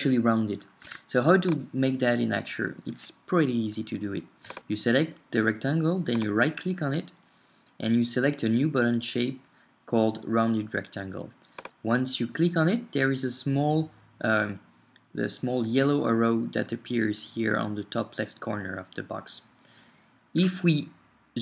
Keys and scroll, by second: 0.9 super+Tab.